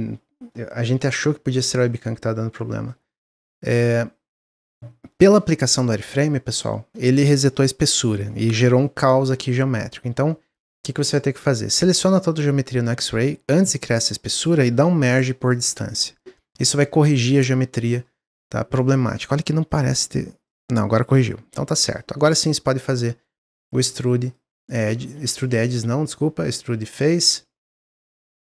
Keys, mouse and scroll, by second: 8.8 middle click, 9.3-9.7 scroll up 2, 9.7-10.1 scroll down 1, 10.4-11.9 drag, 11.9-14.9 middle drag, 14.9 m, 17.3 click, 17.7 middle click, 17.9-18.7 scroll up 2, 18.2 middle click, 18.7 middle click, 19.6 click, 20.4 click, 21.2 ctrl+z, 21.4 scroll down 3, 21.7 middle click, 22.2 a, 23.6-25.5 drag, 25.5 ctrl+z, 26.4-28.4 drag.